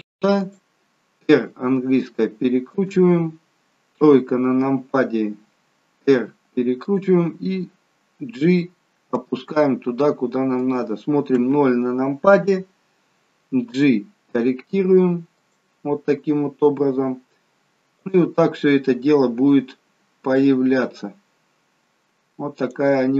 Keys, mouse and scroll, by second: 1.5 r, 4.0 KP_3, 6.2 r, 9.2 g, 11.3 KP_0, 13.7 g, 18.0 click, 22.6 click.